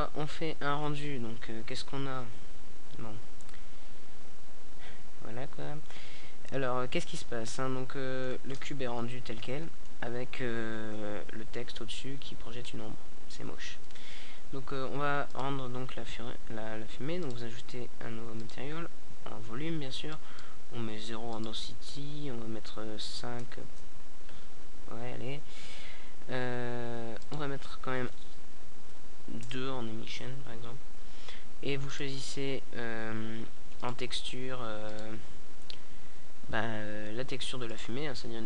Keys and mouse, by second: 0.7 middle click, 4.0-11.8 drag, 11.8-20.1 middle drag, 20.1-25.1 drag, 25.1-38.4 middle drag.